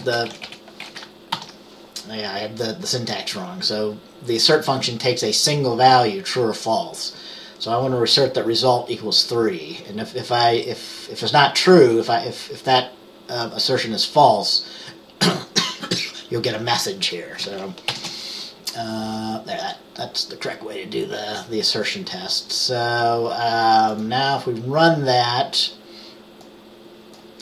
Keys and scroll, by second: 0.0-0.6 typing, 1.4 ctrl+s, 18.0 ctrl+b.